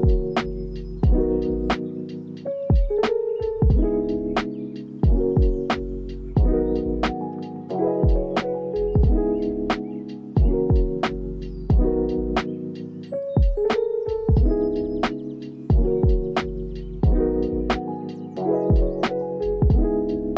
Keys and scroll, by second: 2.5 p, 7.4 ctrl+s.